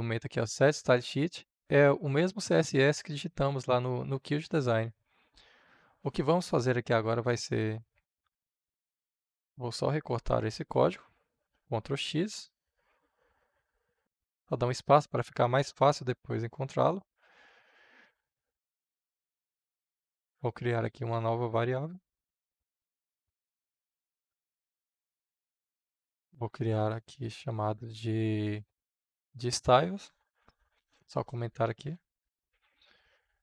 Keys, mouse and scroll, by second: 11.5 ctrl+x, 13.5 click, 14.0 Return, 23.2-25.2 drag, 25.2 Return, 26.2 Up, 27.4 Down, 27.6 Right, 28.4 Up, 29.0 Tab, 30.7 shift+3, 31.0 Return, 31.6 shift+3, 32.0 Return, 32.4 shift+3, 33.0 Up, 33.3 space.